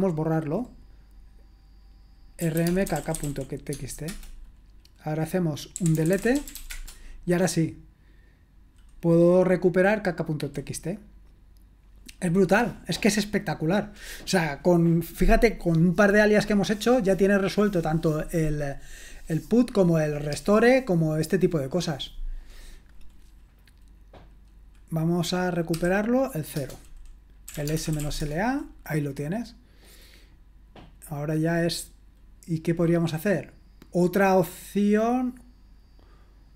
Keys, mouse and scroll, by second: 2.2-7.0 typing, 25.7 0, 26.5 Return, 27.2-28.7 typing.